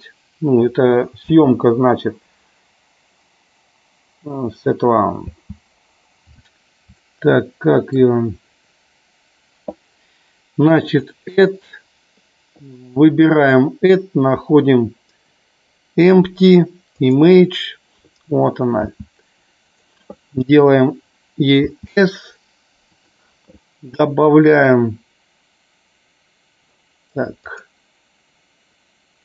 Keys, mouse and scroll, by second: 1.3 space, 5.2 space, 7.1 middle click, 10.0 Delete, 10.8-17.3 drag, 19.7 click, 23.0 click, 27.4 click.